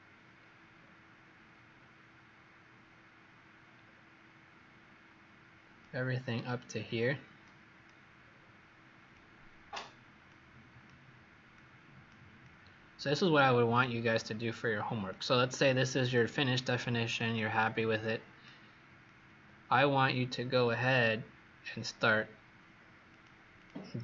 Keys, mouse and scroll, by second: 0.6 scroll down 3, 1.6-2.3 scroll down 1, 2.3-3.7 scroll up 2, 3.7 scroll down 2, 4.6 scroll up 2, 5.7 click, 8.1-9.1 scroll down 4, 9.1 click, 10.2 click, 13.9 click, 15.0 click, 20.2 scroll down 2, 20.9-21.9 scroll up 9, 23.0 click, 23.5 click.